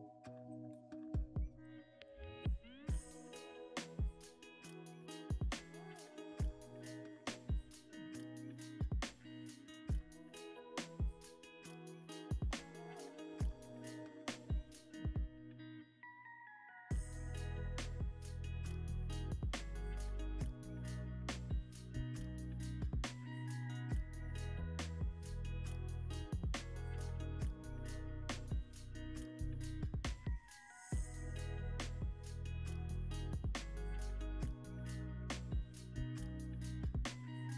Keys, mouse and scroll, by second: 1.9 ctrl+v, 2.9-8.8 drag, 2.9 ctrl+v, 5.1 g, 6.0 x, 6.6 y, 8.8 x, 10.7 y, 12.8-15.5 typing, 18.6 ctrl+v, 19.0 ctrl+v, 19.5 ctrl+v, 23.5 g, 23.8 x, 25.1 y, 26.0 r, 26.2 z, 27.5-29.7 typing, 32.0 ctrl+v, 32.7 ctrl+v, 34.5 middle click, 35.2 e, 35.4 z, 37.2 r, 37.4 z.